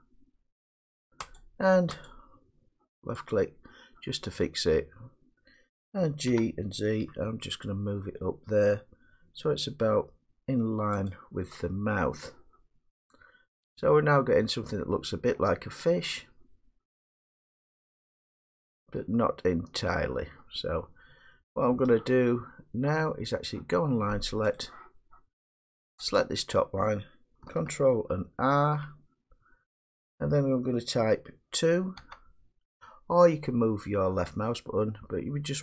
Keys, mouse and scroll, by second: 1.4 click, 2.1 click, 3.3 click, 4.8 middle click, 6.3 g, 7.2 z, 11.6-15.3 drag, 15.3-18.4 middle drag, 18.7 middle click, 19.0-20.5 middle drag, 21.8 middle click, 24.6 click, 26.2 click, 28.5 ctrl+r, 32.0 2, 33.5-34.8 scroll.